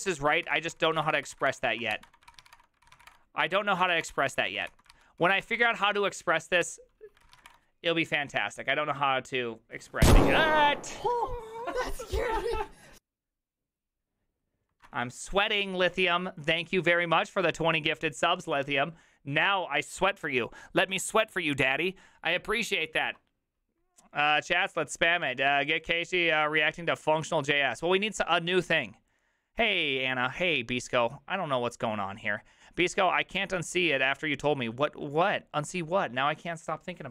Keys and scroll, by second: 0.0-7.5 typing, 6.6 Return, 7.2 ctrl+c, 7.5 Return.